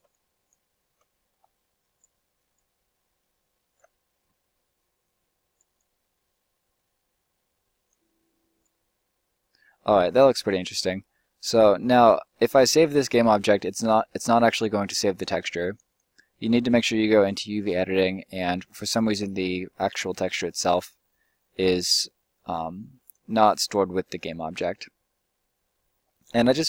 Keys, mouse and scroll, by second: 9.9 middle click, 10.1 middle click, 15.8 middle click, 20.3 click, 22.3 click, 26.3-26.6 drag.